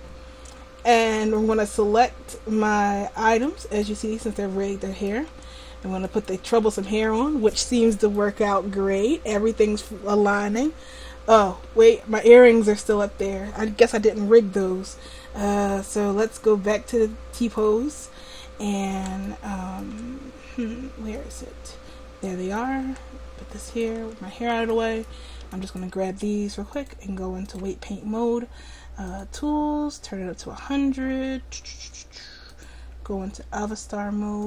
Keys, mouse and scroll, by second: 1.4-3.0 drag, 5.7-8.2 drag, 8.3-9.9 middle drag, 14.5 middle click, 16.8-18.5 drag, 21.2-22.3 right drag, 22.7 click, 23.7-25.7 drag, 27.6-30.8 drag, 32.5-34.4 drag.